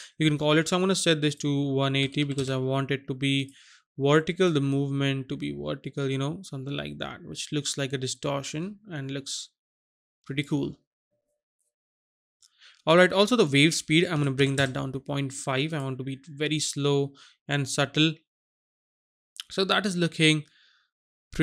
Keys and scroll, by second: 2.1 KP_1, 2.1 KP_8, 2.3 KP_0, 14.2 KP_Decimal, 14.3 KP_5, 14.5 Return.